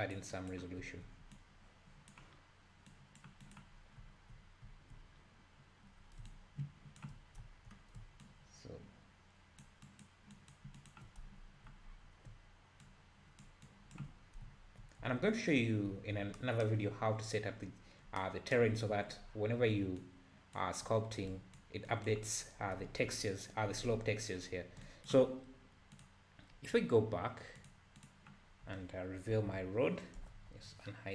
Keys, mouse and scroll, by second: 0.8 `, 1.3-3.8 drag, 3.8 scroll down 1, 6.3-7.3 ctrl+drag, 7.3 scroll down 1, 8.2-11.3 ctrl+drag, 11.3 `, 11.9-12.9 scroll up 1, 12.9-14.2 ctrl+drag, 14.2 scroll down 4, 14.4 `, 15.0 `, 15.5-15.9 scroll up 3, 15.9 `, 20.0-22.8 ctrl+drag, 22.8 `, 24.9-29.3 ctrl+drag, 29.3 alt+h, 30.2 KP_Multiply, 30.3 KP_Divide.